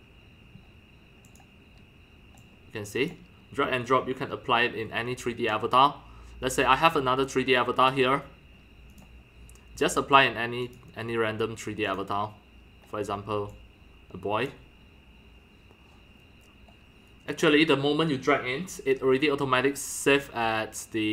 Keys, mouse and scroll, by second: 1.4 click, 2.5-3.1 drag, 5.0-11.2 drag, 11.9 click, 13.5 click, 17.4-18.8 drag.